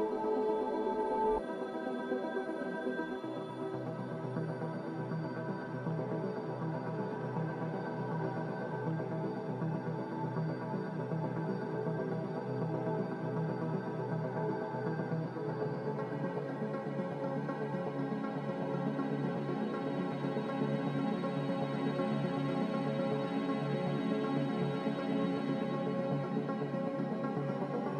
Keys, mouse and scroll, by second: 1.1 m, 10.6 a, 13.1 g, 20.2 Escape, 21.3 z.